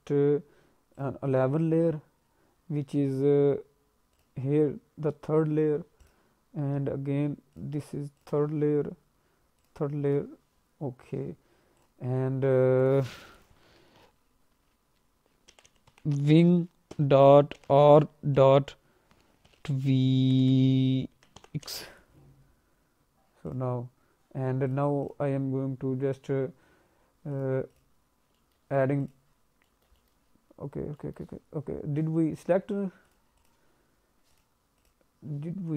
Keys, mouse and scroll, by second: 0.9 click, 4.1 click, 6.0 click, 7.5 click, 8.2 click, 9.6 click, 10.1 click, 11.7 click, 24.6 click, 25.0 click, 27.3 click, 27.7 click, 28.3 alt+middle click, 29.0 click, 29.6 middle click, 29.9 alt+middle click, 30.9 alt+middle click, 33.0 click, 33.4 click, 34.3 click, 34.7 click, 35.6 click.